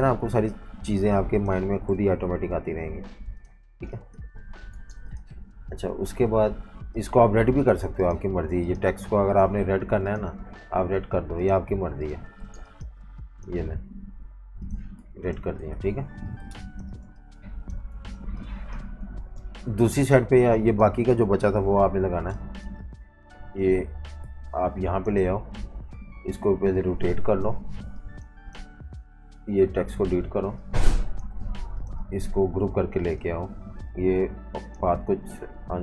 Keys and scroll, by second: 2.0 Up, 2.2 Up, 2.4 Up, 3.7 v, 3.8 space, 4.8 v, 5.9 typing, 12.4 v, 12.5 space, 15.0 v, 15.7 super+-, 15.9 super+-, 16.4-19.8 typing, 21.4 super+c, 22.2 typing, 24.0-25.7 typing, 29.7 Delete, 31.4 super+z.